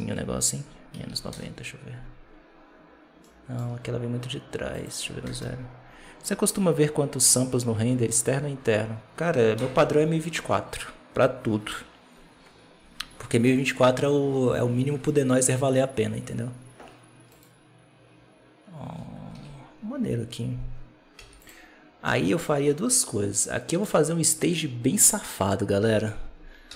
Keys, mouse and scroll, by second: 3.1 middle click, 3.5 scroll down 2, 4.6-7.6 drag, 9.5 KP_0, 17.3-19.3 right drag, 19.3 alt+a, 21.1 z, 21.9-22.3 middle drag, 22.3-22.8 scroll down 2, 22.8-25.7 middle drag, 25.7 KP_7, 26.3 scroll down 1, 26.6 z.